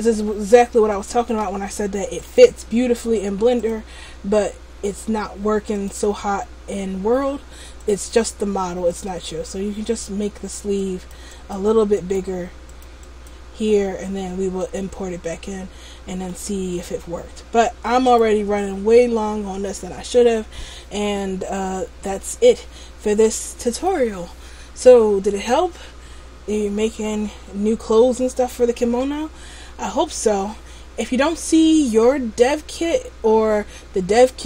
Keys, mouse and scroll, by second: 0.0-1.0 scroll up 4, 1.0 shift+middle click, 1.0 scroll up 1, 2.4 right click, 3.7 click, 5.9 click, 9.0 click, 9.5 click, 10.9 click, 11.4 click, 12.1 click, 12.8 click, 13.1 click, 13.9-14.3 scroll down 3, 14.3 middle click, 15.0-15.9 scroll down 2, 15.9 middle click, 16.5 middle click.